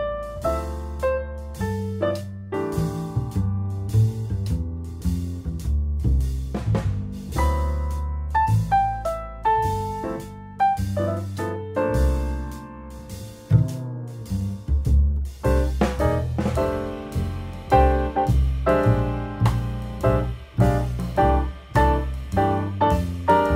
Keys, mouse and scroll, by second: 8.2 shift+a, 10.7 g, 14.0 click, 17.0-19.0 drag, 19.3 0, 20.6 g, 22.9 g.